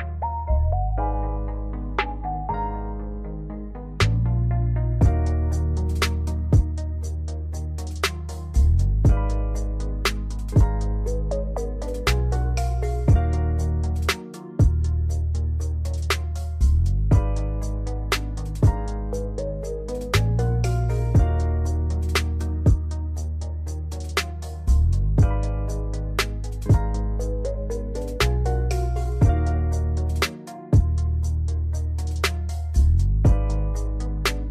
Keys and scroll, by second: 28.5 space, 29.4 space.